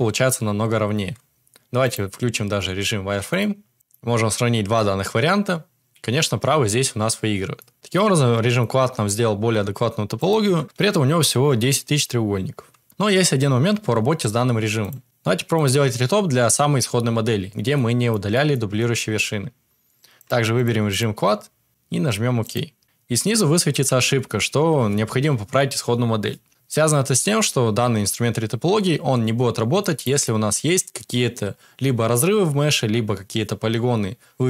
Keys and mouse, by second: 0.9 Tab, 1.8-3.5 drag, 3.7 shift+middle click, 7.5 middle click, 7.7 Tab, 7.9-8.5 middle drag, 10.1 middle click, 10.4 Tab, 13.0 shift+middle drag, 13.8 shift+d, 17.9 shift+middle click, 18.3 middle click, 18.7 shift+drag, 18.7 shift+middle drag, 18.7 shift+right drag, 20.1 click, 20.9 click, 21.7-22.8 drag, 29.7 shift+middle drag, 30.2-30.7 middle drag.